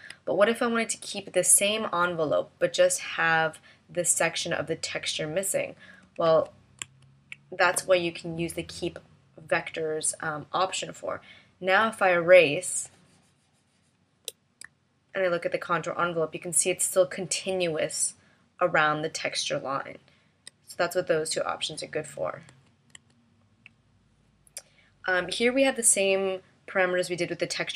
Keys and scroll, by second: 6.2 super+z, 6.8 super+z, 14.6 a, 22.4 super+z.